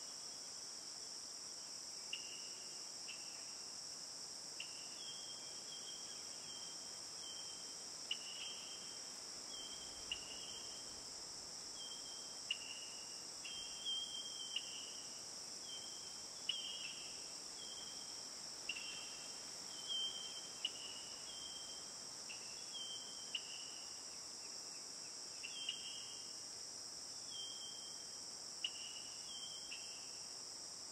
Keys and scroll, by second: 19.0 ctrl+t.